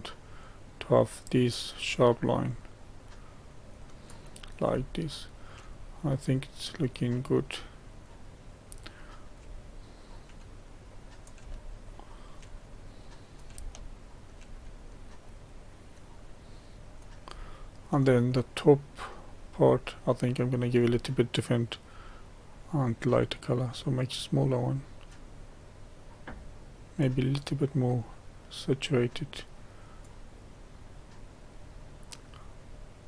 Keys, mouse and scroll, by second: 4.9 shift+middle click, 5.7-8.9 drag, 8.9-12.9 middle drag, 12.9 click, 13.7 shift+middle click, 14.5-17.3 drag, 17.3-19.6 shift+middle drag, 19.6-21.4 scroll up 1, 22.4-33.0 drag.